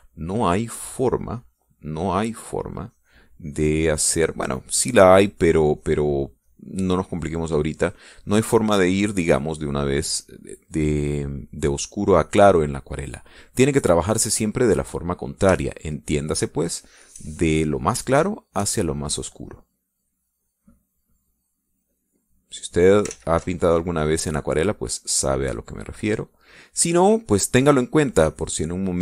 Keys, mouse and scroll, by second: 1.5-13.2 drag, 13.3 click, 15.3-16.3 middle drag, 16.9-18.5 shift+drag, 19.4 shift+click, 20.5-24.0 drag, 24.3 ctrl+z, 24.9-27.5 ctrl+drag, 27.9-29.0 drag.